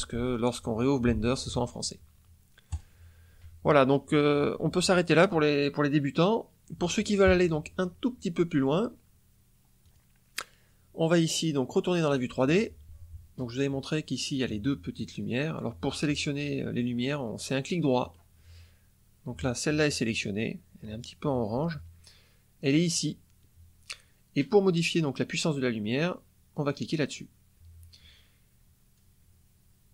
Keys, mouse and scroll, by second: 2.6 click, 9.8 click, 12.0 click, 17.9 right click, 18.3 middle click, 22.6 click, 26.5 click, 28.9-29.9 drag.